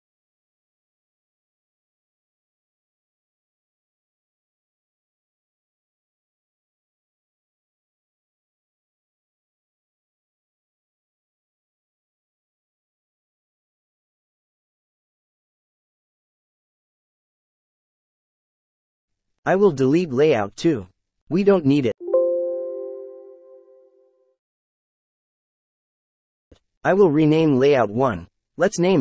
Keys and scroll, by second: 2.0 KP_0, 2.0 ., 2.1 KP_2, 2.3 KP_5, 2.5 Return, 14.6 z, 15.3 Return, 16.1 e, 16.4 Return.